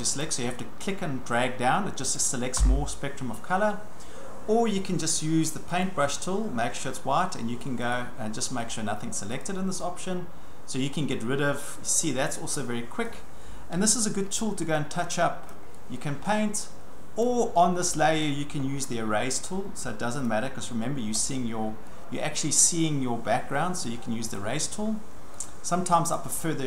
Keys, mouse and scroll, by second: 0.2 click, 2.1 click, 2.6 Delete, 5.8 click, 7.6 click, 8.0 right click, 8.7 click, 9.4 click, 13.1 click, 13.8-14.5 ctrl+scroll, 15.5 click, 17.2 click, 18.3 click, 20.3 click, 21.2-21.8 ctrl+scroll, 24.3 click, 24.8-25.5 ctrl+scroll, 26.1 click.